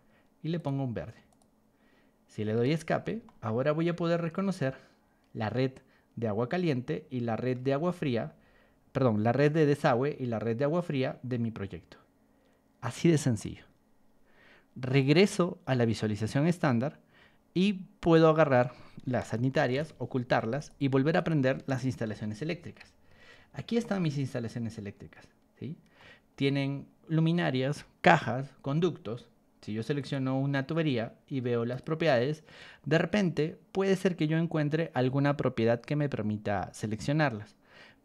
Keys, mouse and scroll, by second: 0.5 click, 1.3 click, 2.3 Escape, 3.2-7.5 shift+middle drag, 7.7-13.3 shift+middle drag, 15.0 click, 16.1 click, 18.0 click, 19.7 ctrl+h, 20.5 click, 21.1 click, 22.0 ctrl+h, 22.6 Escape, 23.0 middle click, 23.0-23.5 scroll down 4, 23.3 middle click, 23.7-25.9 shift+middle drag, 26.3 scroll up 2, 29.9 click, 31.7 click.